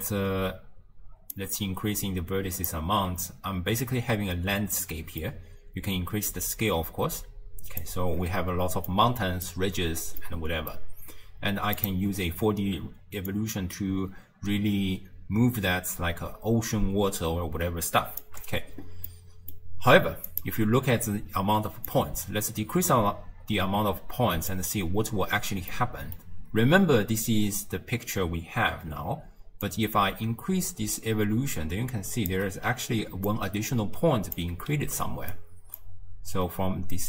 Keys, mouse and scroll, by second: 1.4-4.4 drag, 4.9-6.3 middle drag, 6.3-8.9 drag, 8.9-11.8 middle drag, 11.8 click, 13.3-16.3 shift+drag, 19.1-20.3 middle drag, 20.3 alt+shift+click, 21.0 scroll up 1, 21.9-24.9 drag, 25.8-28.8 middle drag, 29.7-32.7 shift+drag, 32.8 d, 33.3-34.4 drag, 34.4-34.9 d, 35.1-35.4 right drag, 35.4-35.8 d, 35.8-37.0 drag.